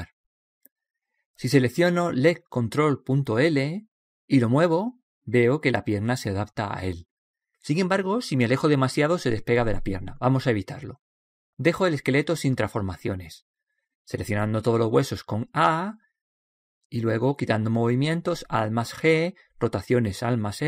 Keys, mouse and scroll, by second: 5.5 g, 13.9 a, 14.2 a, 18.7 alt+g, 20.0 alt+r.